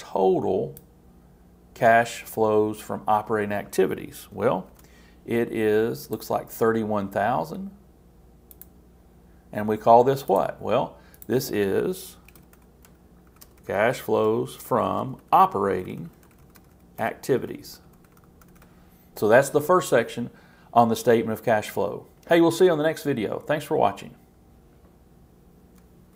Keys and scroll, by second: 4.7 shift+super+t, 12.3 shift+c.